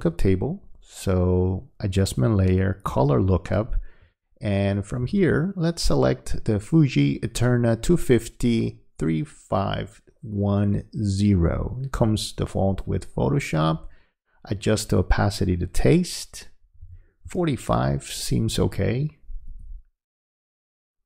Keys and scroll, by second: 16.8 4.